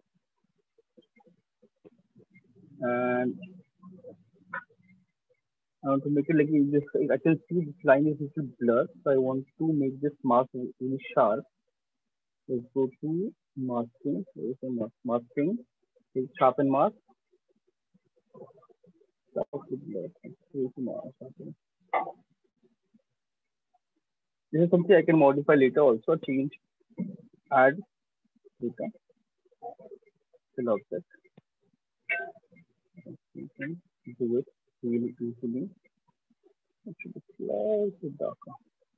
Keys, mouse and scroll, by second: 2.4 alt+click, 2.9 right click, 9.1 click, 11.7 click, 14.5 click, 16.2 click, 16.8 click, 17.2 click, 19.4 click, 21.6 click, 23.1 click, 25.8 shift+click, 28.3 click, 30.0 click, 31.0 click, 31.1 ctrl+click, 32.0 right click, 32.4 alt+click, 33.8 shift+click, 34.3 alt+click, 34.6 ctrl+z, 36.5 shift+right click, 36.9 shift+click, 37.3 shift+click, 37.6 click.